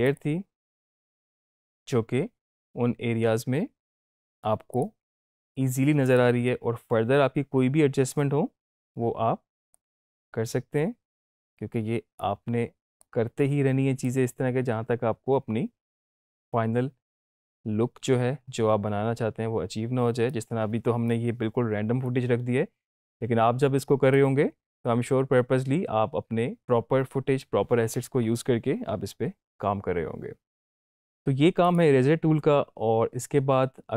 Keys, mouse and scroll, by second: 4.7-10.0 drag, 30.8 click.